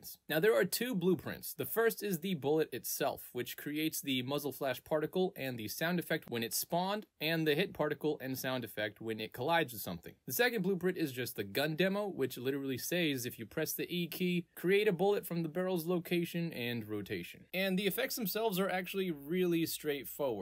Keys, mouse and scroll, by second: 0.0 click, 0.1 click, 0.7 alt+right click, 1.2-2.0 alt+drag, 3.3 click, 4.4 click, 6.2 click, 7.6 click, 8.4 click, 9.0 click, 9.4 right click, 9.8 click, 10.3 ctrl+space, 11.1 click, 11.2 click, 11.4 alt+click, 11.9 alt+right click, 13.0 click, 14.6 click, 16.0 click, 16.9 click, 17.5-19.5 alt+drag.